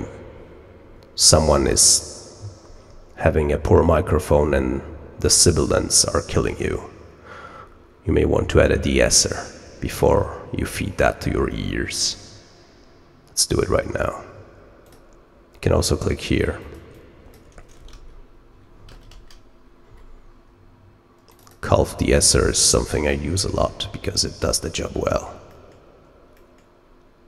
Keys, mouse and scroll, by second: 5.9-6.4 scroll down 1, 6.4 middle click, 8.5 click, 14.8 click, 16.5 click, 16.8 click, 21.2 click, 23.6-24.2 ctrl+scroll down 4, 24.7-25.3 middle drag, 25.4 middle click, 26.3-26.6 middle drag.